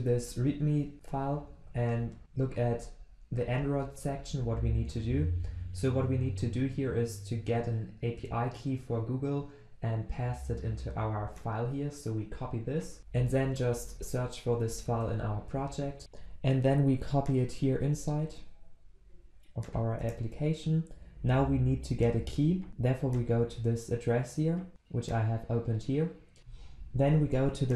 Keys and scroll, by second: 13.0 ctrl+shift+n, 15.0 ctrl+v, 18.0 ctrl+v.